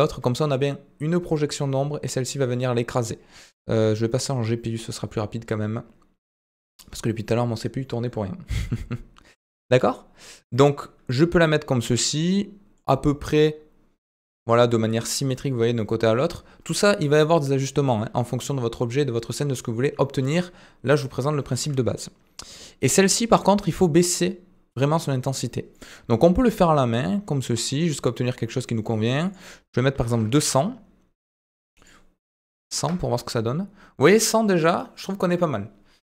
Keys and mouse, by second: 3.3-4.5 drag, 10.8-11.9 middle drag, 12.3-12.9 middle drag, 14.3 middle drag, 15.8-16.2 middle drag, 22.4 click, 24.8 click, 26.4-28.7 drag, 29.3-30.7 drag, 31.8-33.5 drag.